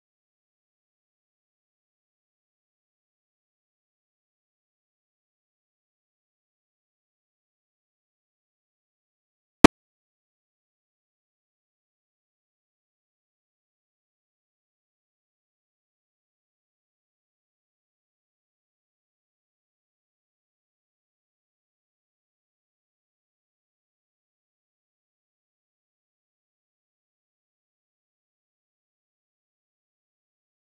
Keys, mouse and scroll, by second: 1.6 click, 3.3 ctrl+j, 4.2 shift+l, 5.3 b, 5.8 KP_Divide, 5.9 scroll up 9, 6.2 scroll down 1, 6.3-6.8 middle drag, 6.8 scroll down 1, 6.9-7.4 middle drag, 7.4 click, 7.6 scroll up 3, 8.0 shift+middle click, 8.2 h, 8.4 scroll down 2, 8.6-8.9 middle drag, 8.9 drag, 9.2 h, 9.3 middle drag, 9.5 scroll up 1, 9.6 middle drag, 9.8 click, 10.0 shift+l, 10.5 h, 10.6 scroll down 1, 10.7-11.3 scroll up 3, 10.7 middle drag, 11.0 middle drag, 11.1 click, 11.3-11.6 shift+middle drag, 11.6 shift+click, 11.7-12.0 scroll down 2, 12.0 h, 12.1-12.5 middle drag, 12.5 click, 12.7 h, 12.8 middle drag, 13.0 scroll down 1, 13.1 click, 13.3 h, 13.3-14.2 middle drag, 14.2 scroll up 10, 14.5 drag, 14.7-17.4 typing, 14.8 middle drag, 14.9-15.3 scroll down 9, 15.1 middle click, 15.3 click, 15.7 click, 15.9 middle click, 16.1 scroll down 2, 16.2 shift+middle click, 16.3 scroll up 2, 16.4 click, 16.7 click, 16.8 middle click, 17.2 ctrl+j, 17.8 KP_Divide, 18.3 shift+click, 19.1 ctrl+c, 19.9 click, 20.2 u, 20.6 click, 21.1 KP_Divide, 21.3 middle drag, 21.5 scroll up 4, 21.8 Tab, 22.1 middle click, 22.3 3, 22.4 click, 23.2 scroll up 1, 23.4 shift+click, 24.2 ctrl+l, 24.5 shift+middle click, 24.7 p, 25.3 middle click, 25.4 Tab, 25.6 Tab, 25.7 Tab, 25.8 click, 25.9 Tab, 26.0 a, 26.2 alt+j, 26.4 KP_0, 26.6 scroll up 2, 26.7 shift+middle click, 26.9 Tab, 27.1 shift+middle click, 27.3 KP_Divide, 27.5-27.8 scroll up 4, 27.8 shift+middle drag, 28.0 shift+click, 28.2 ctrl+c, 28.8 click, 29.7 scroll down 1, 30.0 KP_0, 30.1 KP_0, 30.4 Home, 30.7-30.8 drag.